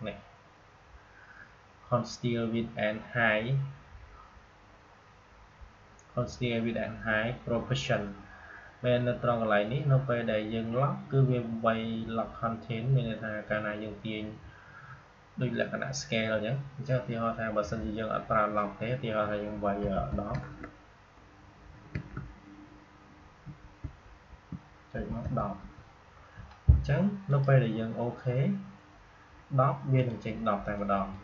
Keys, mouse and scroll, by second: 23.4 Caps_Lock, 24.2 Tab, 27.2 click, 29.9-31.2 drag.